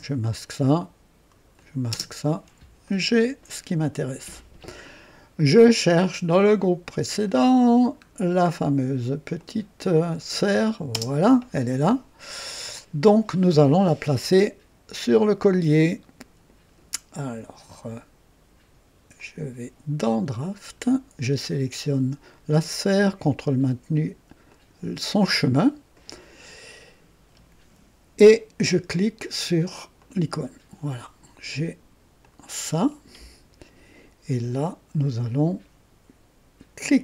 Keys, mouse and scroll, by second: 1.5 click, 1.9 space, 2.8-3.7 right drag, 7.0 click, 7.7 scroll down 1, 9.3 click, 10.4 click, 10.9 space, 19.1 click, 20.3 click, 24.5 ctrl+click, 29.9 click, 32.2-32.8 drag, 36.8 click.